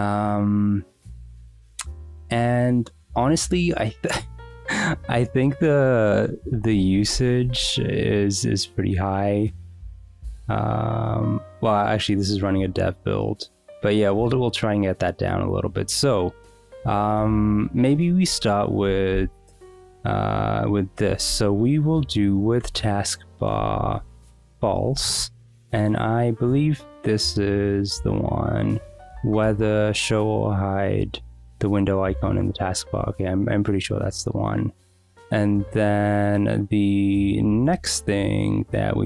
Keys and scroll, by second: 18.5 shift+a, 18.8 Return, 19.1 ., 20.7-22.0 typing, 22.6 Return, 23.5-25.5 typing, 24.0 Escape, 33.0 Escape, 37.7 shift+a.